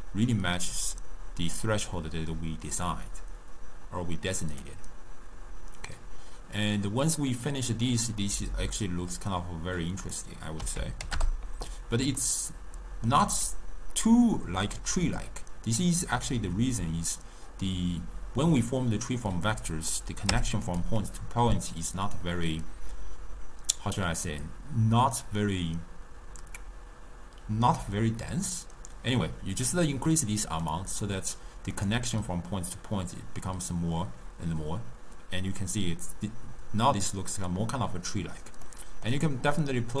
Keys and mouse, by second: 8.3-10.1 middle drag, 10.1-12.3 drag, 12.3-15.3 middle drag, 20.0 click, 30.7-34.8 drag, 38.8-40.0 middle drag.